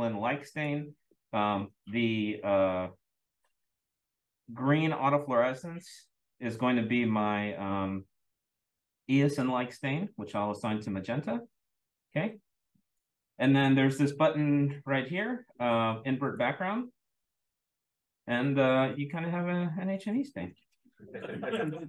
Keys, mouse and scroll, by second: 0.5 click, 1.7 click, 10.7 click, 11.9 click, 15.1-15.7 scroll up 2, 16.2 click, 17.5-18.4 scroll up 2, 18.4-19.7 scroll up 2, 21.5-21.8 drag.